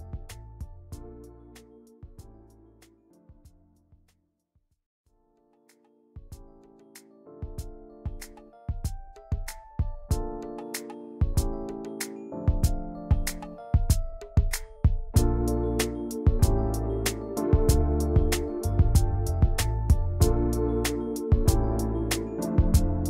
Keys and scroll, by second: 0.5 t, 3.1-5.2 typing, 6.7-8.1 typing, 13.4 i, 13.9 v, 18.1 g, 19.1 v, 19.9 t, 21.2-23.0 typing.